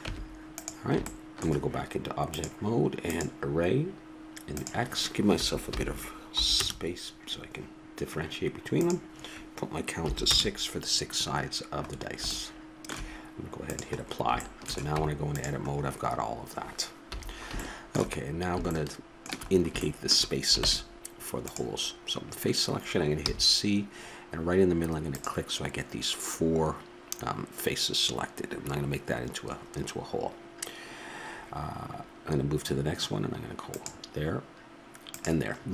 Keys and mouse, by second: 0.0 Tab, 2.2-4.2 drag, 4.5-6.3 drag, 8.8-10.6 drag, 11.8 middle click, 12.0-12.6 middle drag, 13.6-15.4 drag, 14.9 Tab, 17.1 a, 20.6 ctrl+Tab, 23.2 c.